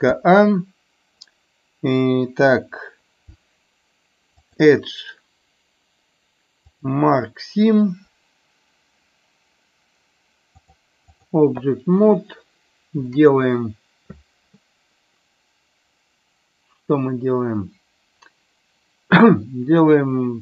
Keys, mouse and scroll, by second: 4.5-7.0 drag, 10.6 click.